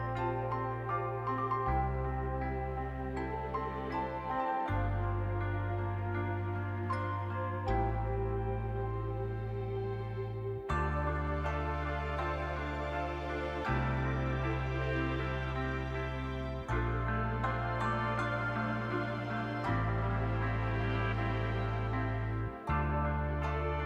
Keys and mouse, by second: 0.1 click, 2.0 click, 2.7 click, 3.6 click, 5.5-6.8 drag, 11.0 click, 14.0 middle click, 15.2 shift+click, 15.8-17.0 drag, 19.4 click, 19.7 click, 21.6 click, 23.1 click, 23.6-23.8 middle drag.